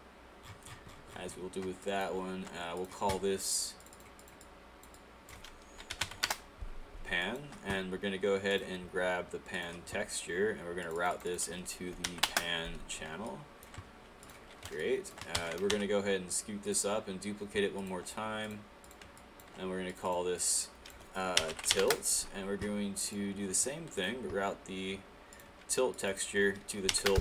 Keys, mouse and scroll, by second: 1.8 click, 2.9 click, 5.9 p, 6.3 Return, 7.2 click, 12.3 Return, 13.6 alt+click, 14.4 click, 16.7 click, 17.8 alt+click, 19.2 alt+click, 21.9 Return.